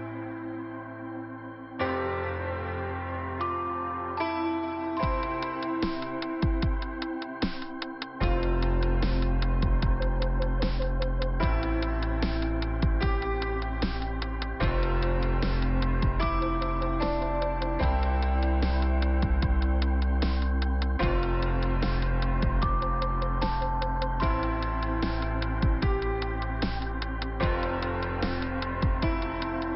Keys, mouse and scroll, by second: 0.4 click, 1.6 middle click, 2.7 click, 5.1 click, 5.8 click, 7.2 click, 7.9-8.4 scroll up 1, 8.4 click, 8.8 click, 9.8 click, 9.9 click, 10.7 middle click, 11.9 click, 12.6 click, 14.1 click, 15.5 click, 16.8 click, 16.9 click, 18.9 scroll down 1, 20.7 middle click, 22.7 middle click, 23.7 f, 24.8 middle click, 26.6 click, 27.7 click.